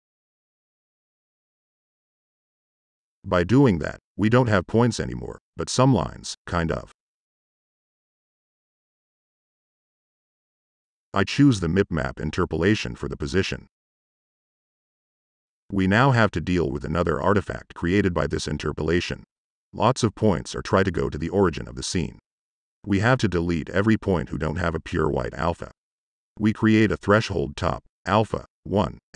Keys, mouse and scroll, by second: 12.7 click, 21.7 Tab, 22.9 click, 23.0 Tab, 23.6 h, 24.0 click, 24.3 click, 24.6 click, 26.0 click, 26.7 click, 27.7 click, 28.2 u, 28.9 click.